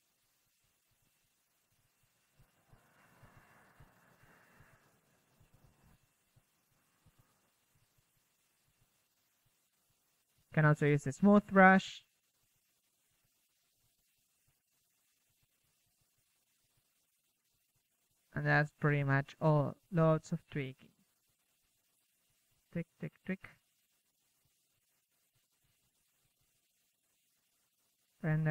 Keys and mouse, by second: 1.2 middle click, 3.2 shift+f, 3.3 middle drag, 5.7-12.0 drag, 14.4-15.3 drag, 14.7 KP_1, 16.2 middle drag, 17.4-22.9 drag, 23.7 KP_3, 24.3 drag, 25.0 KP_3, 26.2 KP_1, 26.8 KP_0.